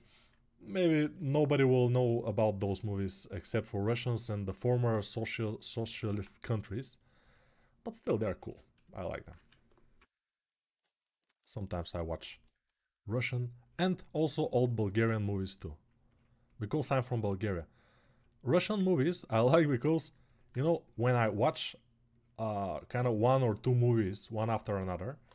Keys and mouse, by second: 1.2 ctrl+alt+right click, 1.8-25.3 ctrl+alt+drag, 9.7 [, 10.2-11.9 [.